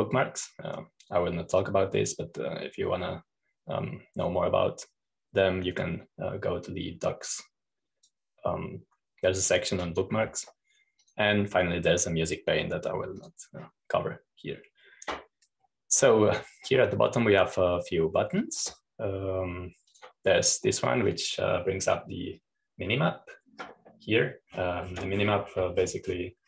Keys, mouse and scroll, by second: 0.0 click, 1.0-2.1 drag, 3.2-10.1 drag, 11.4 click, 12.5-13.6 drag, 14.8-16.1 drag, 17.2-17.9 scroll down 1, 21.6-23.1 drag, 26.0-26.4 scroll down 2.